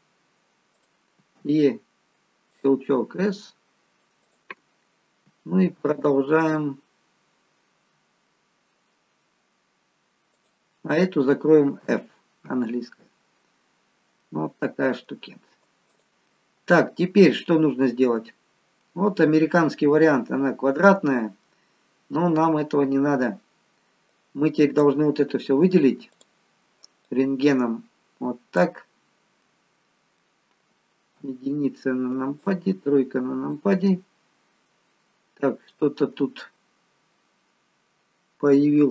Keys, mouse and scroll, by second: 1.3 e, 3.0 s, 6.3 e, 12.9-13.7 scroll up 4, 12.9 f, 13.7-14.2 scroll down 3, 14.2 middle click, 14.2-14.7 scroll down 3, 15.8 click, 16.3 middle click, 18.5 scroll down 2, 18.8 middle click, 24.0 click, 26.1 click, 27.1 click, 29.6 middle click, 31.2 KP_3, 32.4 click, 34.3-34.6 scroll up 1, 34.6 middle click.